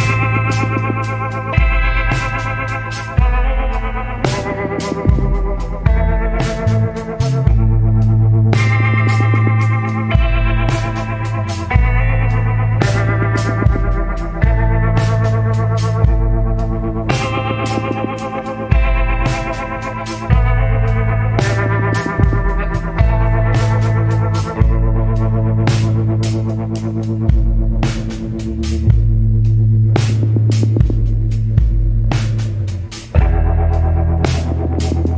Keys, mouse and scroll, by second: 2.2 scroll down 1, 3.0 scroll up 1, 24.5 scroll down 1, 25.6 scroll up 1.